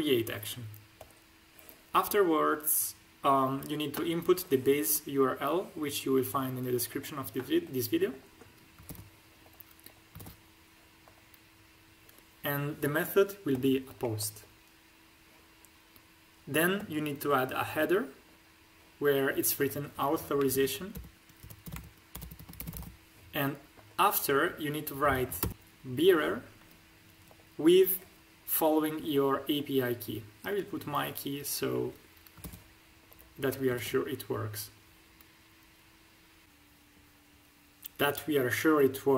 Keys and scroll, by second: 8.8 ctrl+c, 10.1 ctrl+v, 20.4-22.9 typing, 25.3 shift+b, 25.5 space, 32.3 ctrl+c, 33.7 ctrl+v.